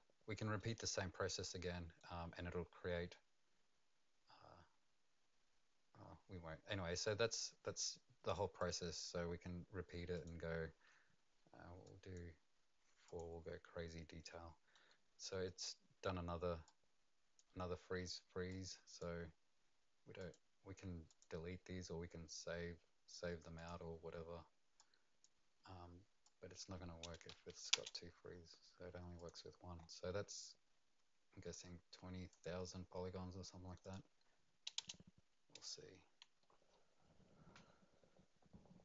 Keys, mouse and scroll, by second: 0.7 right click, 8.6 click, 10.1 click, 13.0 click, 14.2 middle click, 16.6 click, 18.5 click, 20.2 click, 21.1 click, 21.6-23.5 scroll down 8, 23.5 click, 24.7 click, 26.2 click, 27.3 Delete, 27.7 Return, 29.2 click, 29.7-30.8 scroll up 4, 30.8 scroll down 1, 32.3 click, 33.8 click, 34.8 Return.